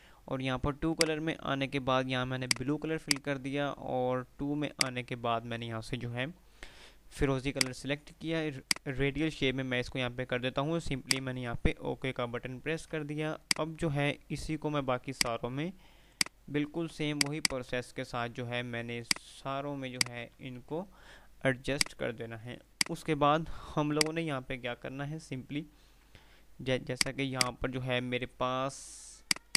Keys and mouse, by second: 1.0 click, 7.6 click, 11.2 click, 12.5 F3, 13.6 ctrl+click, 14.8 ctrl+r, 15.2 ctrl+click, 15.5 ctrl+r, 16.2 ctrl+click, 16.8 ctrl+r, 16.8 ctrl+click, 17.2 ctrl+r, 17.5 ctrl+click, 17.9 ctrl+r, 19.0 ctrl+click, 19.3 ctrl+r, 20.0 ctrl+click, 20.3 ctrl+r, 21.0 F3, 21.9 click, 22.2 F2, 22.6 click, 22.9 F2, 24.0 click, 24.3 F2, 25.0 F3, 27.0 click.